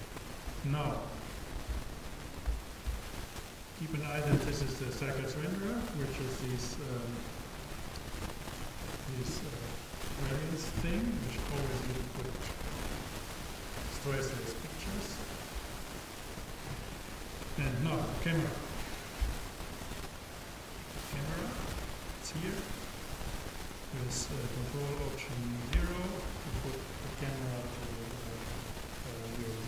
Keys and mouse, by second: 2.5 n, 3.8-5.5 drag, 19.3 shift+a, 25.8 ctrl+alt+KP_0.